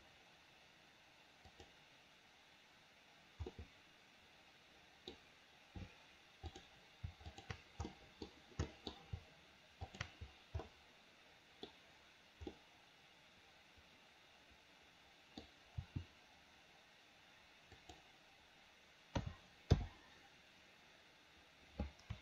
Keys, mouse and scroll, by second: 3.6-5.2 middle drag, 6.6 click, 7.4 shift+click, 7.9 middle click, 8.8 middle click, 9.9 shift+click, 10.7-11.8 middle drag, 12.6-15.5 middle drag, 15.9 r, 19.3 a, 19.9 i.